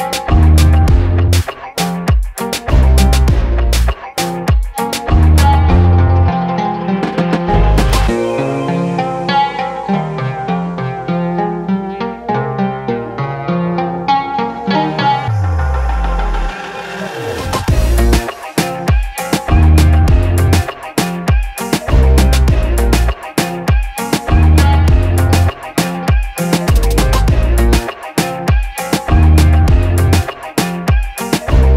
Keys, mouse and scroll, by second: 0.5 v, 1.4 click, 3.2 space, 3.4 click, 3.7 space, 4.2 ctrl+click, 5.7 t, 6.6 click, 7.7-9.6 typing, 10.9 click, 14.9-16.7 drag, 24.4 ctrl+a, 27.3 ctrl+a, 30.7 click.